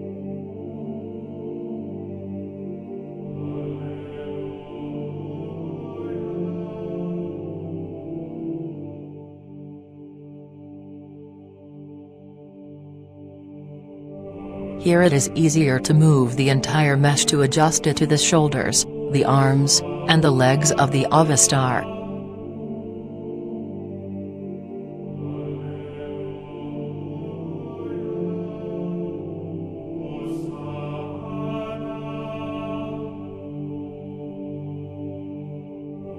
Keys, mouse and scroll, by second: 0.1 r, 1.1 click, 2.6 click, 5.9-6.9 right drag, 7.9-8.9 drag, 13.6 right click, 14.6 g, 17.3 click, 18.6 right click, 19.2 r, 20.7 click, 21.1 right click, 21.5 r, 22.5 click, 22.7 middle click, 23.9 right click, 24.4 r, 25.7 click, 26.7 right click, 27.2 g, 29.4 click, 30.1-31.1 middle drag, 31.6 right click, 32.0 g, 33.0 click, 33.3 right click, 33.5 g, 34.9 click, 35.2 middle click.